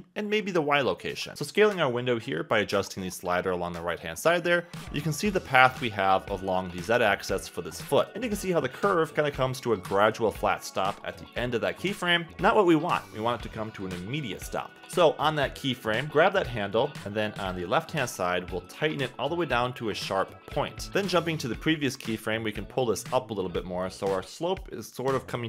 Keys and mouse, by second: 1.3 click, 3.0 click, 8.4 click, 10.0 click, 13.7 click, 16.9 Escape, 16.9 g, 22.0 click, 23.6 g.